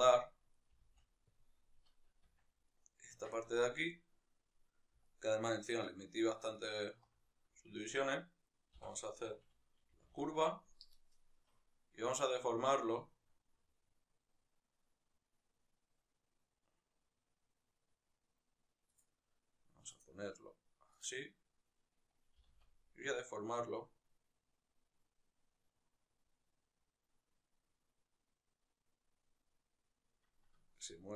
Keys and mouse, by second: 0.3 right click, 0.4 g, 1.1 click, 2.2 Tab, 2.4-3.0 right drag, 3.0 Tab, 4.8-8.5 alt+right drag, 8.5 o, 18.7 right click, 20.6-31.1 drag, 22.2 g.